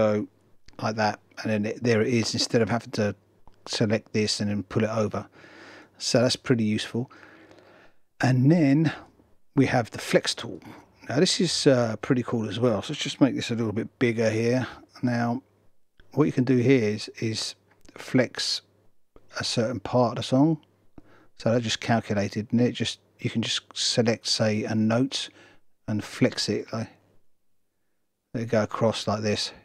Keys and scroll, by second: 0.4 super+r.